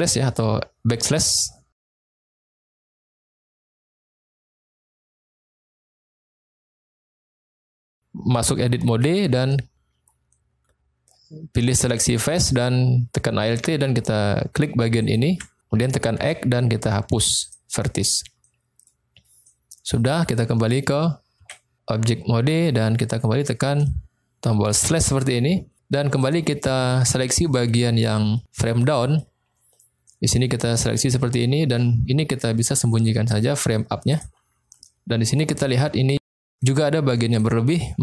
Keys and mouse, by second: 3.0-3.4 shift+middle drag, 4.5 shift+middle drag, 5.5-6.6 middle drag, 8.9 Tab, 9.5 middle click, 11.9 click, 15.0 alt+click, 16.1 x, 18.4 middle click, 19.4 middle click, 21.4 Tab, 26.3 drag, 26.8-27.4 middle drag, 29.0 middle click, 30.0 middle click, 34.0 click, 34.8-35.2 middle drag, 36.1 middle click, 37.1 middle click.